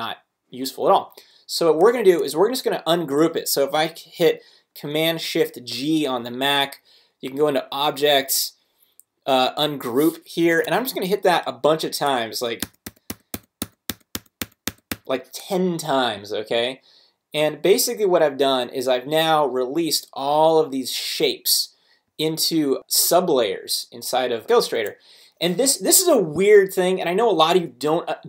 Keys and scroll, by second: 10.4 Escape, 12.6 shift+super+g.